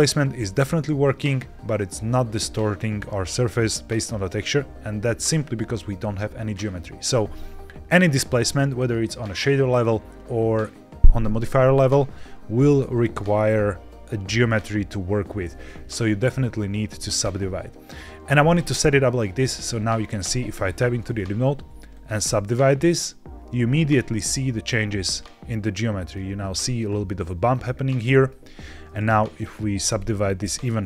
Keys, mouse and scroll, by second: 15.4-15.8 middle drag, 15.8-16.3 scroll down 2, 16.3 middle click, 17.2 scroll up 1, 20.1 Tab, 20.9-22.0 right drag, 23.4 click, 24.7-26.0 middle drag, 27.6 middle click, 28.4 a, 28.9-30.0 right drag.